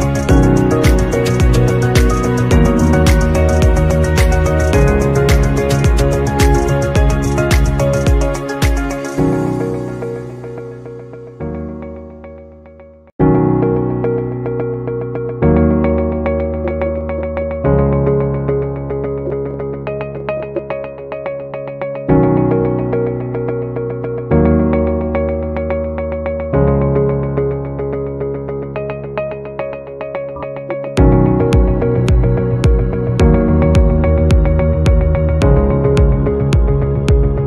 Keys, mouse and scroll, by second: 0.1 0, 8.2 scroll down 1, 12.9 double click, 13.9 BackSpace, 15.9-17.8 typing, 19.1-20.9 typing, 25.7 typing, 26.2 double click, 26.9-32.3 typing.